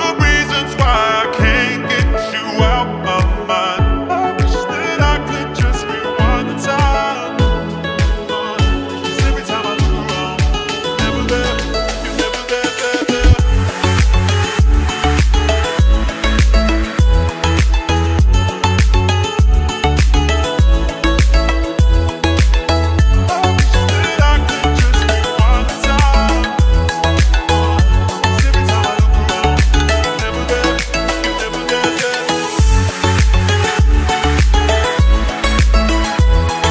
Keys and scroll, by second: 4.9 ctrl+q, 9.9 ctrl+z, 10.3 Escape, 18.5 r, 26.7 ctrl+z, 28.2 ctrl+z, 29.2 shift+Page_Down, 29.7 Escape, 33.1 shift+F2, 33.5 Escape.